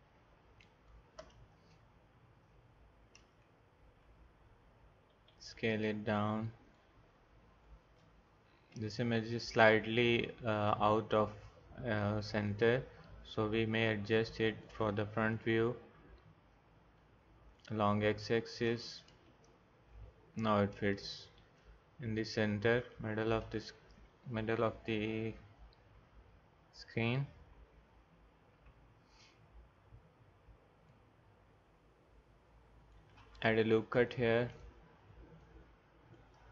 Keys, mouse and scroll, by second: 1.6 KP_0, 3.2 KP_0, 3.6 KP_Decimal, 5.1 s, 28.6 n, 31.5 click, 34.5-36.5 drag.